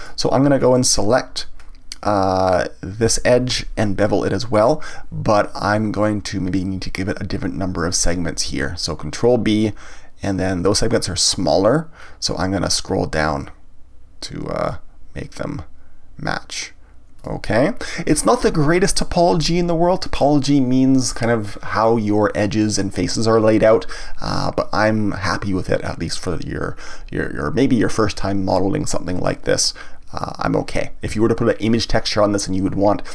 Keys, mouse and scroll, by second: 0.5-1.0 scroll up 1, 1.0 scroll down 1, 1.6-2.4 scroll up 1, 2.4 click, 4.0 scroll down 1, 4.6-7.6 scroll up 1, 8.5 ctrl+b, 17.2 click, 28.5-29.5 scroll down 1, 29.5-32.5 middle drag.